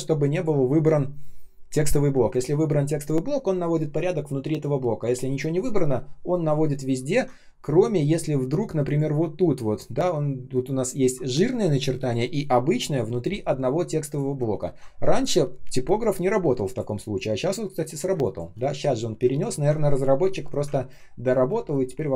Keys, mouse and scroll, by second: 0.2 ctrl+click, 7.3 ctrl+scroll up 1, 8.0 ctrl+click, 8.4 ctrl+scroll up 1, 14.4-14.7 ctrl+scroll down 1, 16.2 ctrl+scroll down 1, 17.8 ctrl+scroll down 1, 18.0 space, 19.2-20.4 ctrl+scroll up 1, 20.7 ctrl+scroll down 1, 21.4 space, 21.9 space.